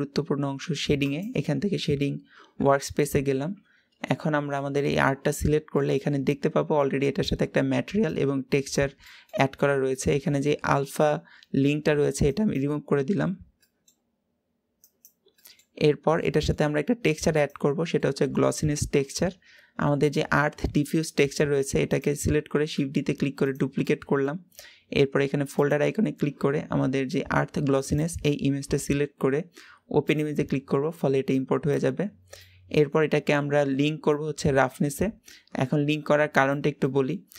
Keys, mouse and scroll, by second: 1.0 click, 4.0-4.6 scroll up 3, 4.6 middle click, 5.2-5.6 scroll up 5, 6.6-15.0 drag, 15.8-17.0 middle drag, 17.0-21.8 drag, 22.4 shift+d, 25.8-30.1 drag, 34.8 click, 35.8-37.3 drag.